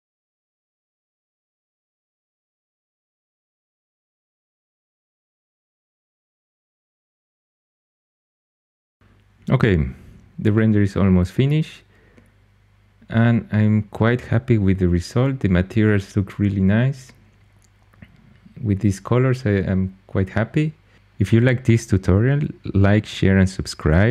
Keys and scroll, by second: 0.0-5.0 typing, 5.1 Return, 5.3 super+z, 7.6-9.3 typing.